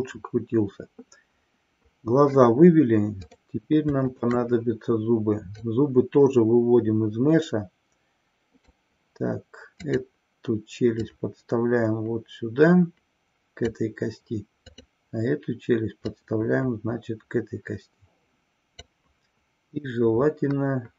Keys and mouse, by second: 3.1 click, 4.3 shift+click, 5.7-8.8 drag, 10.0 click, 11.1-13.7 drag, 14.7 click, 16.0-19.0 drag.